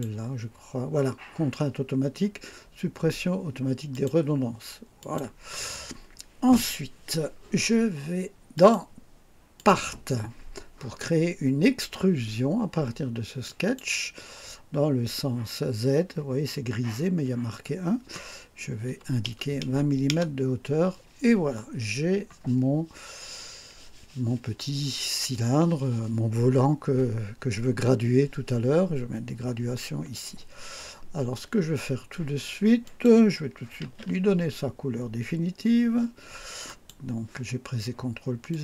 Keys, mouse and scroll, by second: 3.9 click, 5.0 click, 8.5 click, 9.5 click, 13.4 click, 18.9 KP_2, 19.2 KP_0, 20.1 KP_Enter, 32.8 click, 33.8 ctrl+d, 36.6 click, 38.5 click.